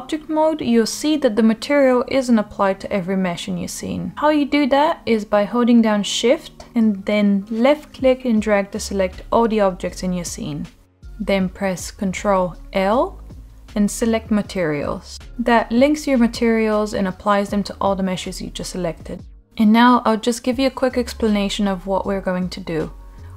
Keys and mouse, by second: 1.7 click, 3.9 middle click, 7.2-8.6 shift+drag, 11.2 ctrl+l, 16.4 click, 19.9-21.3 drag, 21.8 drag, 22.0 middle drag, 22.6 click.